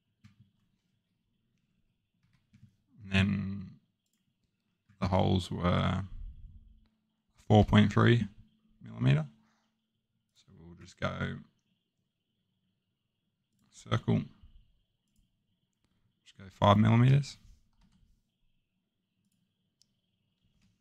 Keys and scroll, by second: 2.2 Escape, 16.9 5, 17.7 Return.